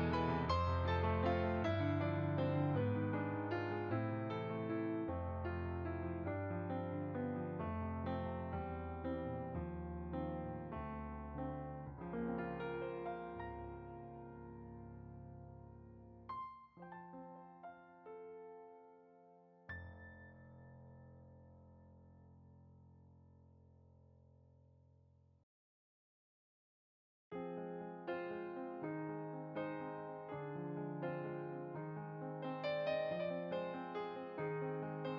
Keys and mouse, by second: 1.6 shift+click, 6.4 shift+click, 9.3 middle click, 13.0 click, 17.0 shift+a, 18.1 click, 18.7-20.8 typing, 19.3 click, 20.9 click, 22.1 g, 22.8 click, 23.3 ctrl+z, 24.2 g, 24.7 click, 25.4 s, 25.7 z, 26.2 ., 26.7 click, 27.0 z, 27.3 click, 28.4 s, 28.7 z, 29.1 click, 29.7 click, 30.0 s, 30.7 click, 33.4 s, 34.9 click.